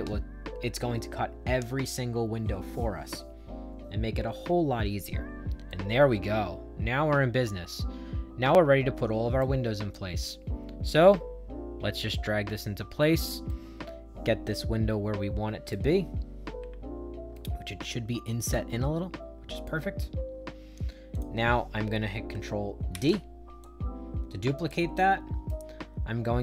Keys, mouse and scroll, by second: 5.6-9.3 right drag, 9.8-13.1 drag, 13.4-15.6 right drag, 16.5 Up, 17.3-19.6 right drag, 21.0 click, 22.8 ctrl+d, 23.5-24.6 drag, 24.9 right click.